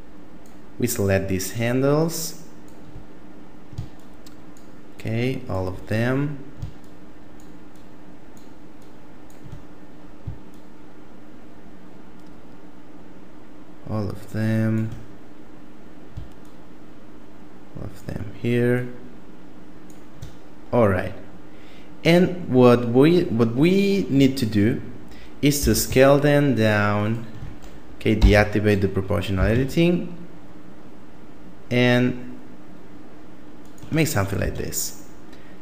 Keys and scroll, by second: 25.6 s, 28.2 o, 29.3 s, 34.4 Tab.